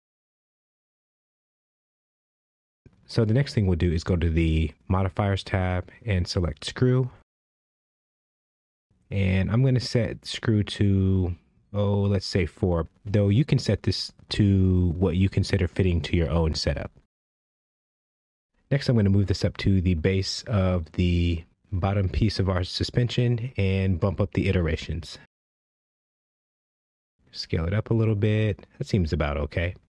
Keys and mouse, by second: 4.3 click, 8.3 click, 9.2-11.2 drag, 11.4-14.1 drag, 19.9 g, 20.4 z, 25.5 click, 25.7 click, 25.9 click, 26.1 click, 26.5 click, 27.1 s.